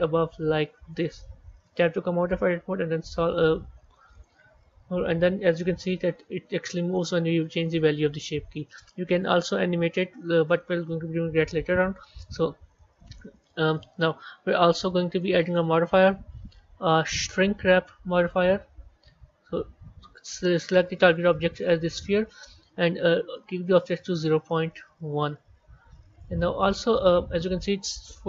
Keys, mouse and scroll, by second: 1.5 Tab, 2.4 z, 5.3-8.4 drag, 10.0-13.1 scroll down 4, 14.6 click, 15.3-18.4 drag, 20.2 click, 23.5 click, 25.9-28.0 middle drag, 28.0 KP_3.